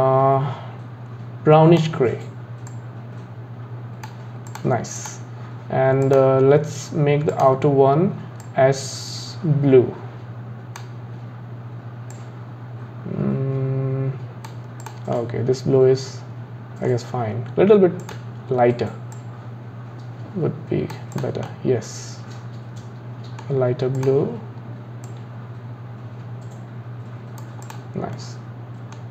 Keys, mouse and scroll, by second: 4.5 click, 5.0 click, 6.0-7.4 drag, 14.8 click, 15.2-18.0 middle drag, 18.0 click, 21.1 click, 21.5-24.0 middle drag, 24.0 click, 27.6 click, 28.1-29.1 middle drag.